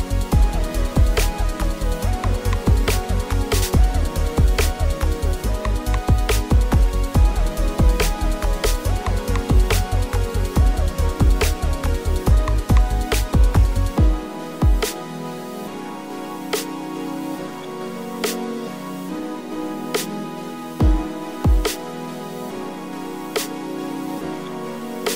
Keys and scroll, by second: 3.1 a, 8.3 g, 12.6 ctrl+r, 14.8 alt+z, 16.1 g, 16.7 g, 17.1 g, 18.5 g, 20.3 ctrl+r, 22.9-25.1 typing.